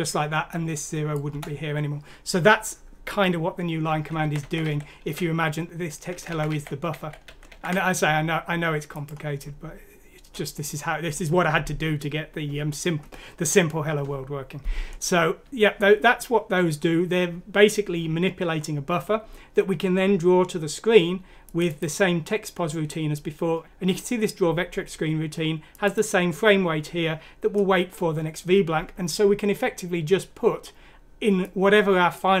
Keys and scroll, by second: 1.3 Delete, 4.2 ctrl+z, 4.4 ctrl+z, 4.6 ctrl+z, 6.3 ctrl+z, 6.5 ctrl+z, 6.9 ctrl+z, 7.2 ctrl+z, 7.5 ctrl+z.